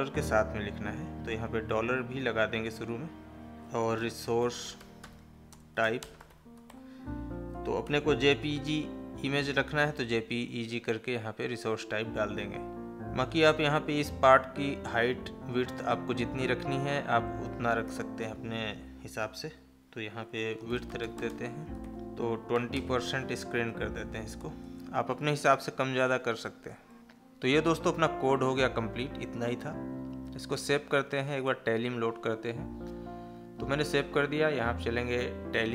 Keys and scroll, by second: 5.4 space, 24.5 space.